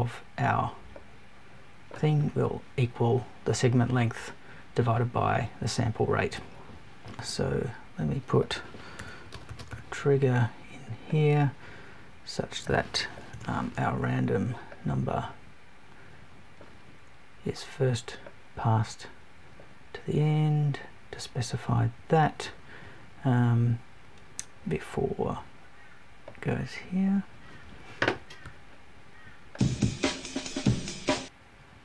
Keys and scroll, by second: 13.3 BackSpace.